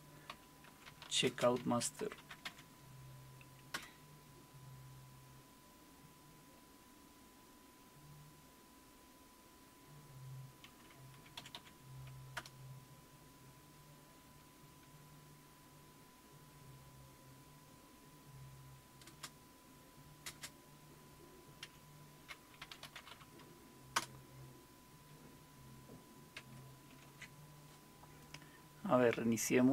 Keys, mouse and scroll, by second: 0.0-2.9 typing, 3.7 Return, 11.4 Up, 11.5 Up, 12.4 Return, 19.1 space, 20.3 typing, 21.6-23.6 typing, 24.0 Return, 26.9 alt+super+q.